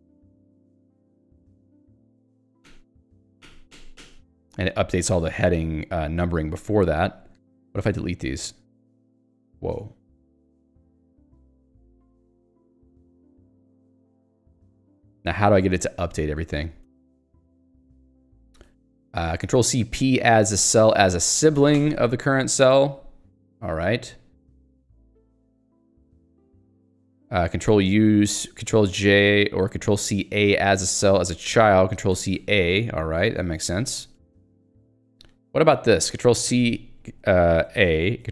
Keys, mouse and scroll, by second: 1.8 Return, 2.7 ctrl+j, 5.1 Escape, 5.6 a, 6.1 shift+Up, 6.8 Down, 7.4 BackSpace, 11.9 click, 12.0-14.1 typing, 12.5 Escape, 15.4 j, 17.1-19.4 typing, 21.0 j, 25.0 ctrl+/, 25.8 Escape, 26.5 k, 30.6 h, 33.9 d, 34.6 ctrl+s, 35.0 k.